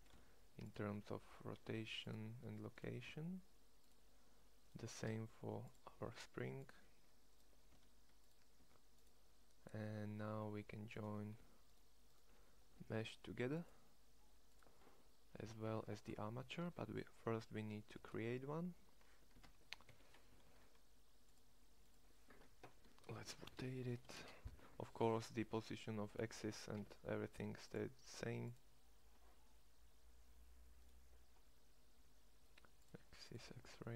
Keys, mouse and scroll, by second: 0.0 ctrl+a, 1.5 ctrl+a, 3.0 ctrl+a, 5.0 ctrl+a, 6.0 ctrl+a, 7.7 ctrl+a, 8.5 ctrl+a, 18.0 ctrl+a, 20.4 shift+a, 23.1 r, 26.7 Tab.